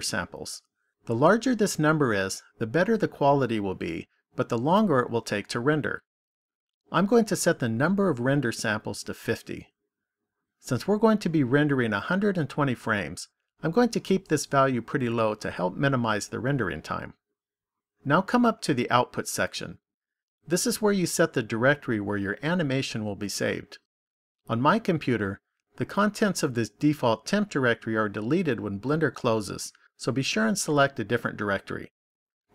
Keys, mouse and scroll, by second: 7.8 click.